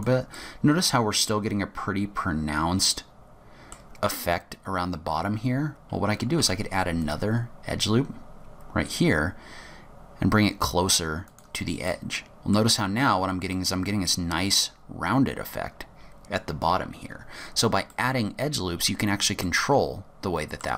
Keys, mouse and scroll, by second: 0.4 middle click, 5.6-6.3 scroll up 1, 6.3 scroll up 1, 6.5 ctrl+r, 12.0 middle click, 12.9-13.9 scroll up 7, 13.6 middle click, 16.1-16.8 scroll down 9, 17.4-18.0 scroll down 5, 18.0 middle click, 19.5 middle click.